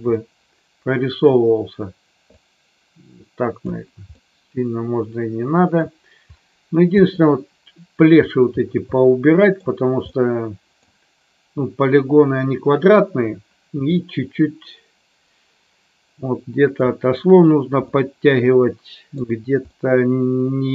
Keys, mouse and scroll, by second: 0.1-1.2 middle drag, 2.2-3.6 drag, 4.0-5.7 middle drag, 7.4 middle click, 9.2-9.6 middle drag, 10.0-10.8 middle drag, 13.9-16.7 middle drag, 17.9-19.2 middle drag, 19.6-20.6 middle drag.